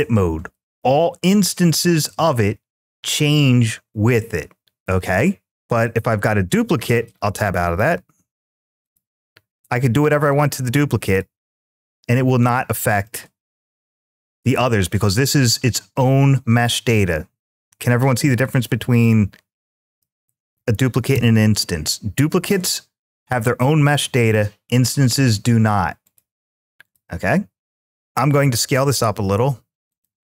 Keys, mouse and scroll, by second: 5.5 click, 6.8 Tab, 7.5 click, 8.0 Tab, 8.7 click, 9.4 click, 9.6 click, 10.9 click, 11.3 g, 12.3 click, 12.9-15.4 middle drag, 18.3 middle click, 19.9 ctrl+z, 20.9 Tab, 25.9 click, 26.6 click, 28.3 s, 29.7-30.2 drag.